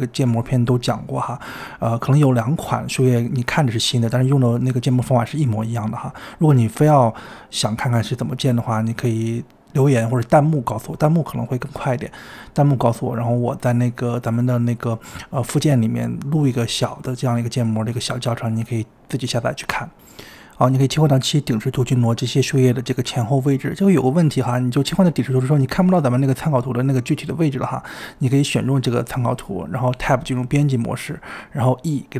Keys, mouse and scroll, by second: 0.0-0.1 typing, 1.1 click, 1.7-5.4 typing, 4.0 click, 4.2 shift+middle click, 6.0 click, 6.6-7.4 typing, 8.6 click, 8.7 click, 8.8-10.2 typing, 10.6 click, 11.0 scroll down 1, 11.3 scroll up 2, 11.4-14.3 typing, 12.0 scroll down 3, 12.2 click, 13.3-13.6 scroll up 2, 15.7 KP_7, 16.6 scroll down 3, 16.9-18.2 middle drag, 18.2 KP_7, 19.2 g, 20.4 g, 24.9-25.4 middle drag, 25.3 click, 25.8 KP_7, 26.3-27.0 middle drag, 27.0 click, 27.8 KP_7, 29.2 e, 30.3 y, 30.7 right click, 31.0 Tab.